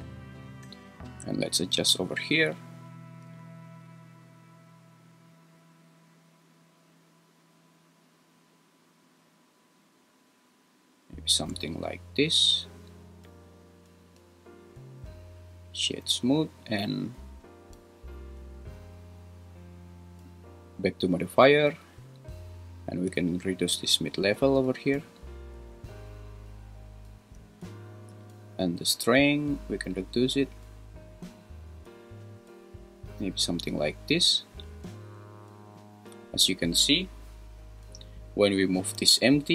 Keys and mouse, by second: 3.3-11.4 shift+drag, 13.8-14.8 right drag, 23.4-27.3 shift+drag, 28.2-33.4 shift+drag, 36.3 click, 39.0 g.